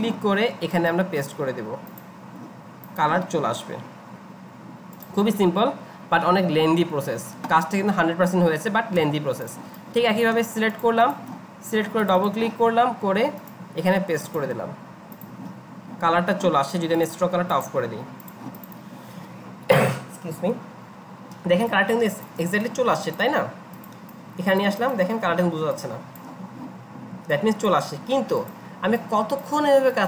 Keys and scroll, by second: 9.0 ctrl+z, 28.1 ctrl+z.